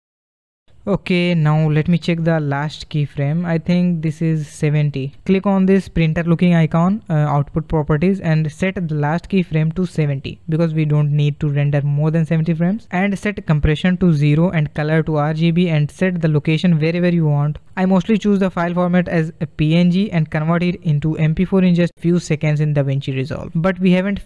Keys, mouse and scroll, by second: 0.6-3.8 drag, 5.4 click, 6.7 click, 7.5-11.1 drag, 11.3 scroll down 2, 13.4-16.4 drag, 16.4 scroll down 3, 16.7-17.4 scroll up 7, 17.4 click.